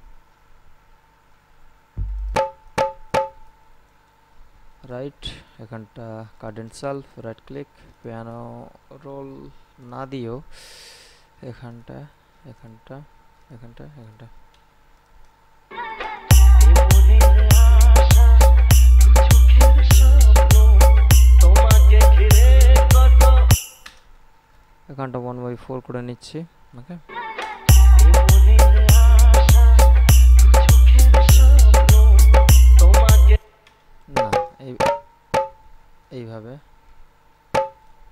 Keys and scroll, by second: 15.9 space, 23.7 space, 27.3 space, 33.7 space.